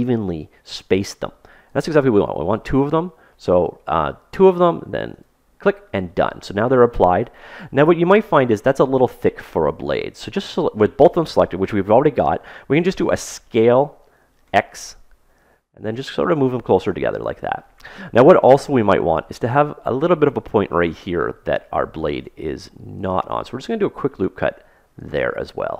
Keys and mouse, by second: 7.7-9.4 middle drag, 13.5 s, 22.1 ctrl+r.